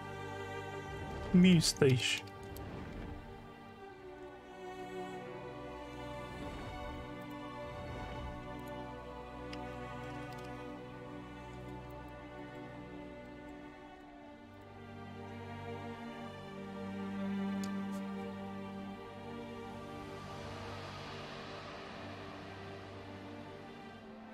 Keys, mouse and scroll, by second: 1.1-2.4 typing, 4.2 scroll down 2, 6.4 scroll down 2, 7.2 click, 8.6 click, 11.9 alt+click, 12.4 alt+middle click, 13.3 alt+middle click, 14.5 click.